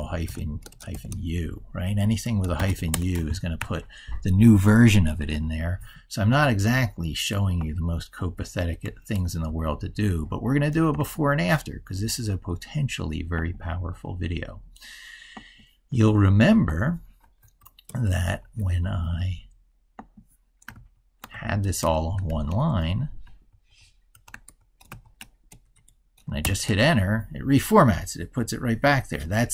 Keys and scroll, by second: 3.4 ctrl+super+Right, 9.2 ctrl+super+Left, 20.6 ctrl+shift+Left, 24.3 ctrl+Right, 24.7 ctrl+shift+Left.